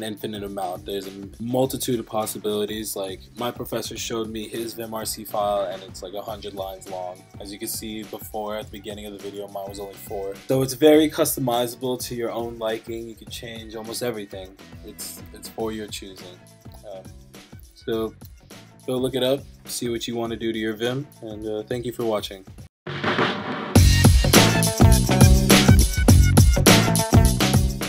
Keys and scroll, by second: 10.4 Up, 10.6 Up.